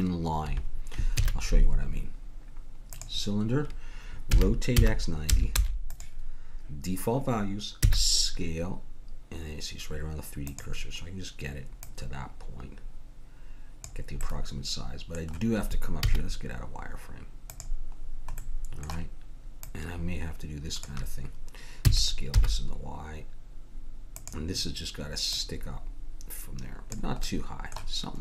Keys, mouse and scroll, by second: 1.1 shift+a, 4.3 r, 7.9 s, 10.2 click, 11.8-13.8 drag, 14.4 middle click, 16.0 z, 19.7-21.3 drag, 21.9 s, 25.3-26.9 drag, 27.2-28.2 middle drag.